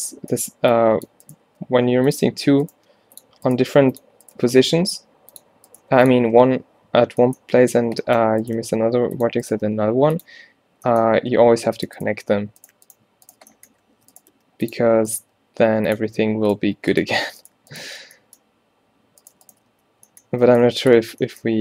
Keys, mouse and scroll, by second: 0.5 a, 0.6 b, 1.5 g, 2.8 g, 3.6 g, 4.4 g, 5.9 g, 7.6 middle click, 8.7 g, 9.7 g, 11.6 ctrl+r, 14.0 a, 14.4 g, 15.3 g, 16.8 g, 18.1 f, 19.8-21.6 typing.